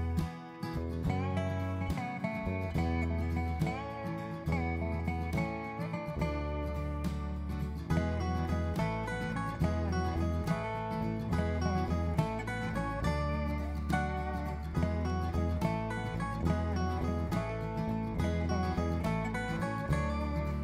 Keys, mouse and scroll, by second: 1.0 shift+click, 4.8 shift+click, 6.0 shift+click, 6.6 right click, 11.4 click, 12.7 click, 14.6 click, 18.7 click, 19.9 click.